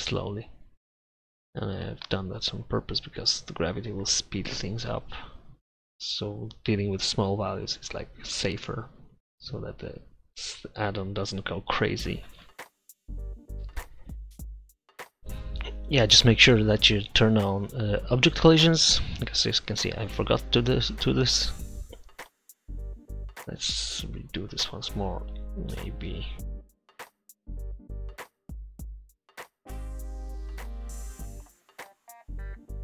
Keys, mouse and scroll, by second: 8.6-12.1 middle drag, 14.7 click, 15.4 BackSpace, 19.3-21.2 middle drag, 21.2 Escape, 23.1-25.4 drag, 25.4 middle click, 26.5 click, 27.1 click.